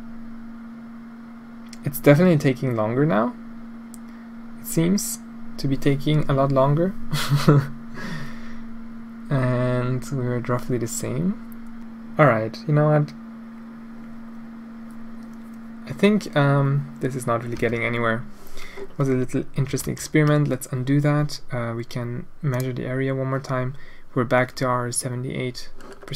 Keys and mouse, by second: 19.8 ctrl+z, 22.6 click.